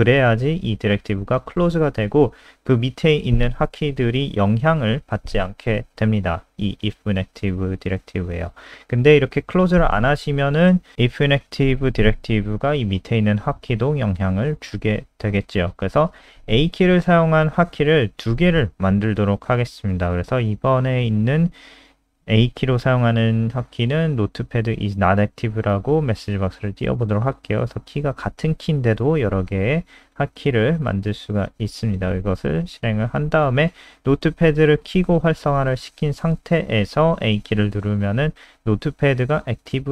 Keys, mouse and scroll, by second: 0.8 Return, 0.9 Return, 2.4-4.5 typing, 5.2 click, 7.8 Delete, 9.6 click, 11.6 ctrl+z, 11.8 click, 12.8 Right, 13.1 BackSpace, 14.0 Escape, 14.4 click, 15.2-16.4 typing, 17.1 click, 18.5-19.8 typing, 21.1-23.8 typing, 23.9 click, 28.0 F5, 28.8 super+n, 29.9 alt+click, 38.0 a.